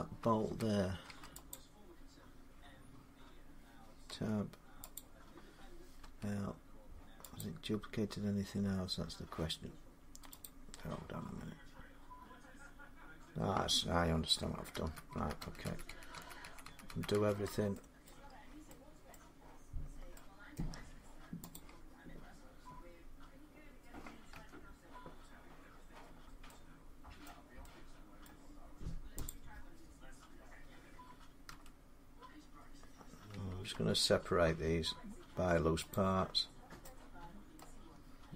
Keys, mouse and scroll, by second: 0.9 middle click, 1.3 click, 3.9 Tab, 4.8 click, 7.2 click, 10.3 click, 14.6 ctrl+z, 15.0 ctrl+z, 15.2 ctrl+z, 15.5 ctrl+z, 15.7 ctrl+z, 15.9 ctrl+z, 16.2 ctrl+z, 16.5 ctrl+z, 16.7 ctrl+z, 17.0 ctrl+z, 17.9 middle click, 18.1 scroll down 2, 18.9 middle click, 19.7 scroll up 2, 19.8 scroll, 20.4 scroll, 21.4 click, 24.2 Tab, 24.9 scroll up 1, 25.9 scroll down 2, 26.5 scroll up 2, 27.1 middle click, 28.1 middle click, 29.1 click, 31.3 typing, 33.1 a, 33.5 p, 35.7 click, 36.5 scroll down 3, 37.2 scroll, 37.4 middle click.